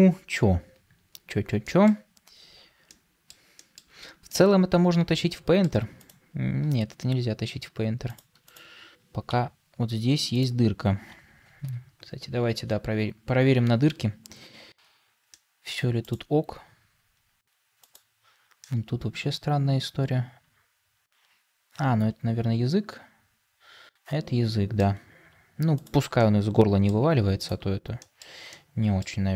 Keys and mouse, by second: 1.5 shift+middle drag, 2.8-3.2 middle drag, 3.5 shift+middle drag, 4.2-5.6 middle drag, 6.8 Tab, 11.5 KP_Divide, 13.3 KP_Decimal, 15.2 middle click, 18.5-24.7 middle drag, 26.1 middle click, 27.9 shift+middle click, 28.4 middle click.